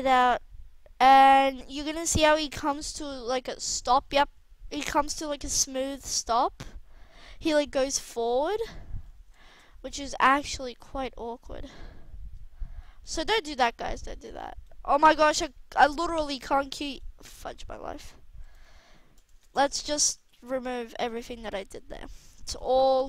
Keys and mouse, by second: 3.9 alt+a, 4.7-5.5 drag, 5.5 alt+a, 7.2 alt+a, 15.7 middle click, 16.3-18.0 drag, 18.0 g, 19.4 ctrl+z, 19.6 ctrl+z, 19.9 ctrl+z, 20.1-20.6 ctrl+z, 21.3 ctrl+z, 21.4 ctrl+z, 21.5 ctrl+z, 21.7 ctrl+z, 21.9 ctrl+z, 22.1 ctrl+z, 22.5-23.0 ctrl+z.